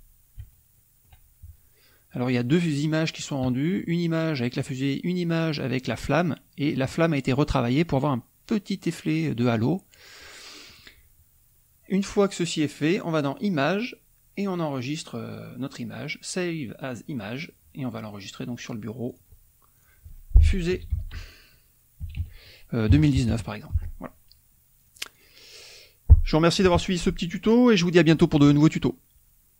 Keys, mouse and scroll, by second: 0.4 shift+click, 13.3 click, 17.1 click, 19.0 click, 19.7 click, 20.4-23.2 typing, 24.7 click.